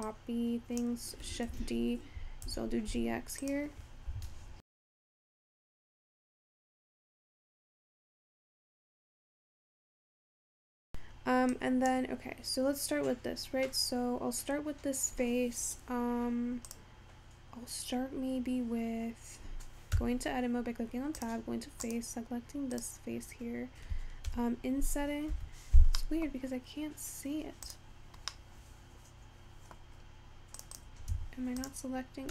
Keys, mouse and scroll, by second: 2.6 shift+d, 9.8-12.6 scroll down 2, 12.6-13.2 scroll up 3, 13.9-17.7 scroll up 2, 17.7 click, 22.0 click, 25.5 Escape, 26.1-32.3 middle drag.